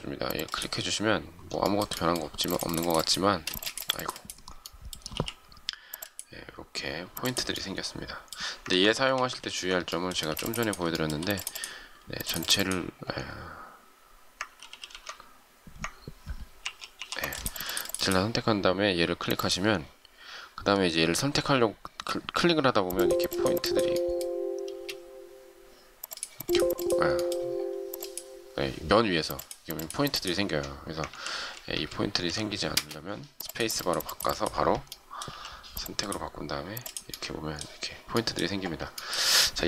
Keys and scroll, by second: 3.4 space, 5.0 m, 8.6 ctrl+z, 9.0 ctrl+z, 10.1 space, 14.3 ctrl+z, 16.5 ctrl+y, 24.6 space, 31.0 ctrl+z, 32.6 space, 35.2 m.